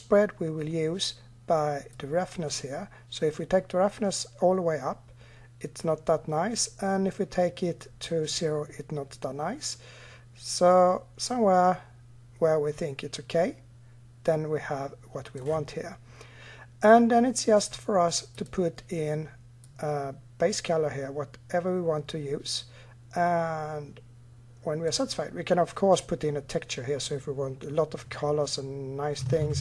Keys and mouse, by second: 16.6-24.0 drag, 29.2 shift+a.